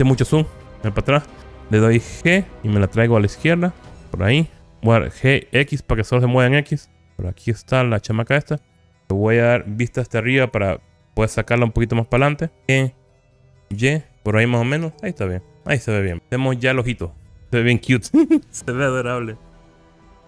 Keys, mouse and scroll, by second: 0.3 Escape, 0.7-1.4 scroll down 5, 2.6 scroll down 6, 2.6 g, 5.7 x, 8.1 click, 9.8 KP_7, 11.1-12.3 scroll up 2, 12.4 shift+middle click, 12.6 n, 12.6 g, 13.8 y, 14.4 click, 15.5 KP_1, 15.7-16.2 scroll down 6, 16.2-18.1 middle drag.